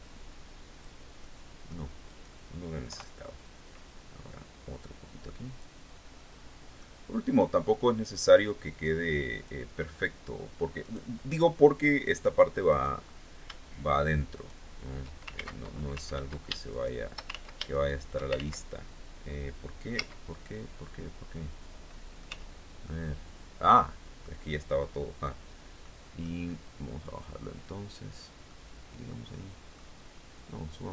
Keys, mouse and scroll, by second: 0.8 middle click, 1.6 right click, 2.4 KP_3, 3.2-5.3 drag, 5.7 middle click, 6.9-8.0 middle drag, 8.9 click, 9.3-9.7 scroll up 1, 10.4 right click, 11.6 right click, 12.2 right click, 13.9 shift+right click, 14.8 ctrl+shift+x, 14.9 ctrl+shift+z, 15.6 ctrl+z, 16.2 ctrl+shift+right click, 16.8 ctrl+shift+z, 17.2 ctrl+shift+click, 17.9 ctrl+shift+z, 19.5 z, 20.4-21.9 middle drag, 21.8 z, 22.4-23.9 middle drag, 25.4 middle click, 26.7-27.9 drag, 28.0-29.4 middle drag, 29.9-30.9 drag.